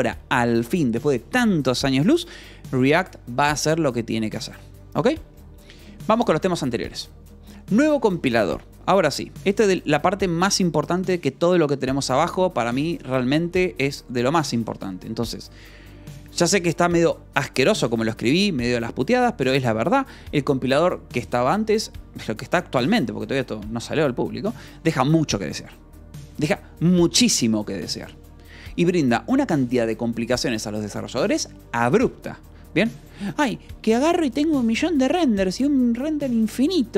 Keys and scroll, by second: 1.5 Escape, 4.6-10.4 typing, 6.2 Escape, 8.0 Escape, 11.4 j, 18.0 Escape.